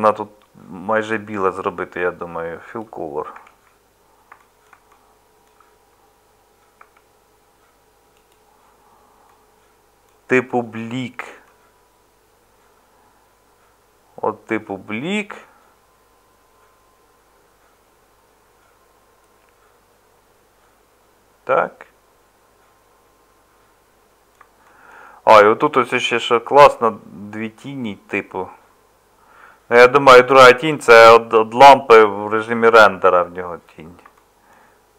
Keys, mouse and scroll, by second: 3.3 Tab, 6.8 Tab, 25.0 middle click, 34.6 middle click.